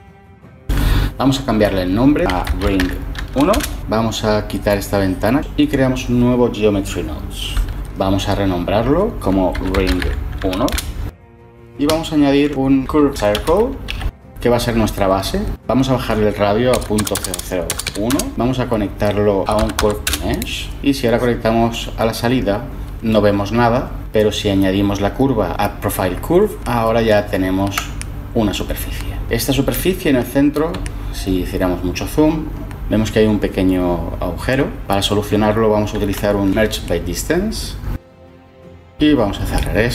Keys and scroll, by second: 1.9-3.0 typing, 8.0 typing, 9.2-14.0 typing, 16.6-18.3 typing, 19.8 Page_Down, 20.0 Page_Down, 20.5 Return, 35.8 ctrl+shift+a, 36.2-37.5 typing.